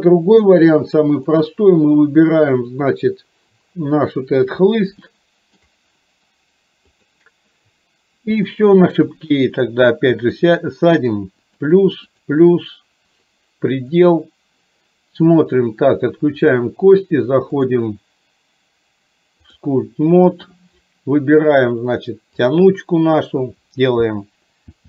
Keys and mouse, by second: 0.6 click, 5.1 shift+middle click, 7.0 click, 8.6 shift+middle click, 10.4 click, 11.7 click, 13.3 click, 16.4 click, 17.8-19.7 drag, 22.6 click.